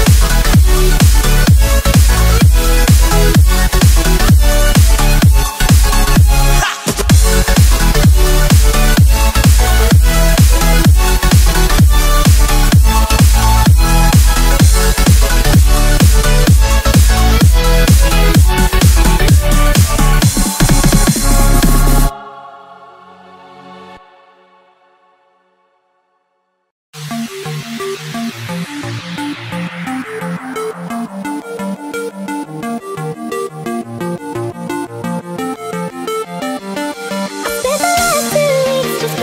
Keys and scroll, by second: 3.2 space, 3.8 alt+super+space, 3.8 alt+super+space, 3.9 alt+super+space, 4.0 alt+super+space, 4.3 alt+super+space, 4.8-6.0 typing, 6.0 alt+super+space, 8.5-12.0 typing, 19.3 super+z, 19.8 super+z, 22.4 super+z, 23.5 a, 28.5 space, 29.0 alt+super+space, 29.1 alt+super+space, 29.2 alt+super+space, 29.2 alt+super+space, 29.4 alt+super+space, 30.4 v, 30.7 space, 31.2 space, 32.6-33.1 typing, 36.3 space, 36.8 super+space, 36.9 super+space, 37.0 super+space, 37.1 super+space, 38.6 u.